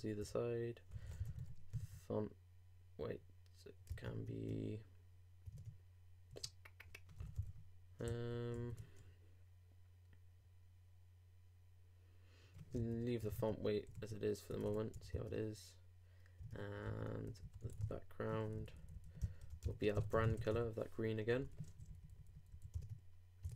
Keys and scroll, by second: 0.2 super+Return, 3.9 super+e, 3.9 super+Tab, 5.5 super+Tab, 6.3 super+BackSpace, 8.0 super+t, 8.5 super+z, 13.2 shift+BackSpace, 15.1 super+Return, 15.2 super+Tab, 16.5 super+Tab, 16.8 super+b, 19.5-20.4 typing, 22.7 super+Left, 22.8 super+Tab.